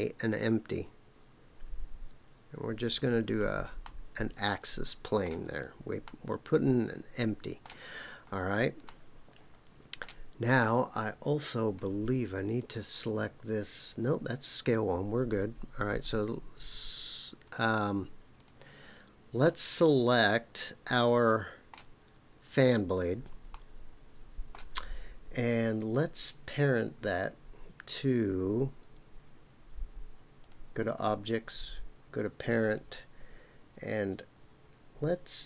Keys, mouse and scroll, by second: 3.8-5.3 middle drag, 5.5-6.2 scroll down 3, 6.1-7.7 middle drag, 8.0-8.8 scroll up 2, 8.8-10.1 middle drag, 8.8-9.3 scroll up 1, 12.5 click, 15.9 click, 17.4 click, 18.4 click, 19.4-21.7 middle drag, 23.5-24.5 middle drag, 30.4 click, 32.5-35.4 drag.